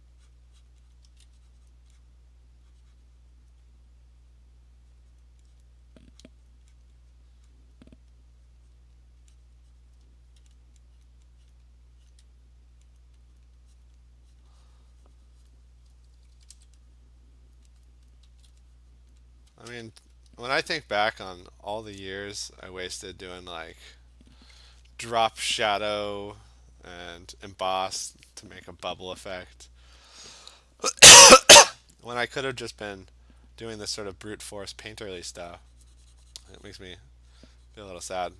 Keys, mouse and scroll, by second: 0.0 click, 0.4 click, 0.7 click, 1.0 click, 1.1 [, 1.7 click, 2.1 click, 2.3 click, 3.2 click, 3.5 click, 5.2 click, 5.2 [, 5.6 click, 6.4 click, 6.5 click, 6.8 click, 7.8 click, 8.5 click, 8.7 click, 9.6 click, 10.0 click, 10.6 click, 11.1 click, 11.5 click, 12.1 click, 13.0 click, 13.4 click, 13.9 click, 14.5 click, 15.5 click, 15.9 ], 15.9 click, 16.2 ], 16.4 ], 16.6 ], 17.6 click, 17.9 click, 18.1 click, 18.3 [, 19.1 click, 19.6 click, 20.9 alt+click, 21.0 alt+click, 22.7 click, 24.3 click, 27.3 click, 34.9 alt+click, 36.9 click, 38.1 click.